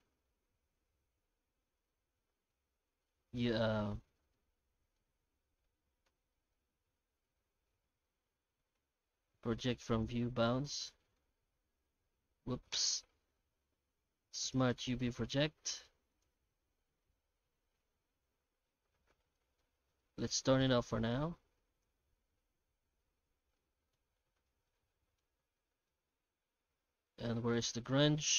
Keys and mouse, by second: 4.1 Tab, 4.3-5.0 middle drag, 6.0 alt+middle click, 6.9 Tab, 7.6 u, 10.5 Tab, 10.8 middle click, 12.1 Tab, 12.9 u, 17.7 Tab, 19.5 middle click, 20.0 middle click, 21.1 click, 22.2 Tab, 22.9 Tab, 23.4 alt+shift+z, 23.7 shift+middle drag, 24.8 middle click, 25.9-27.1 middle drag, 27.3 middle click, 28.3 middle click.